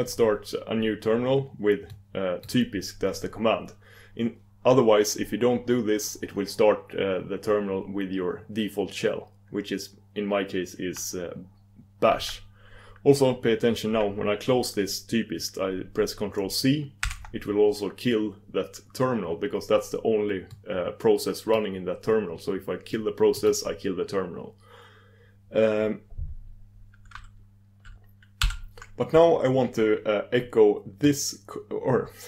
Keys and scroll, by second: 17.2 ctrl+super+Return.